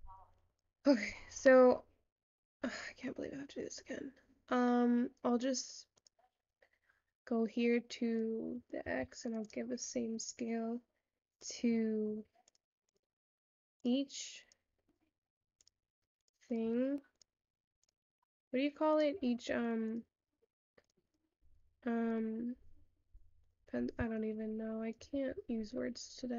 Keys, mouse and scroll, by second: 10.8 click, 11.4-12.8 drag, 15.1 click, 18.9 click.